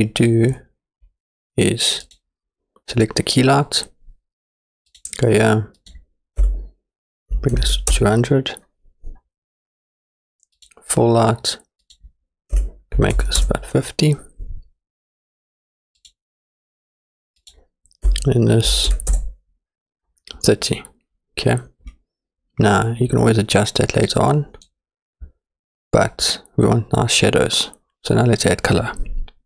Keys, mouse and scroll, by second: 0.6-1.5 scroll down 2, 1.5-2.1 scroll down 1, 2.1 click, 4.9 click, 5.8-8.0 drag, 7.7 KP_0, 10.6 click, 11.8-13.4 drag, 16.0 click, 17.4-19.1 drag, 24.1 click.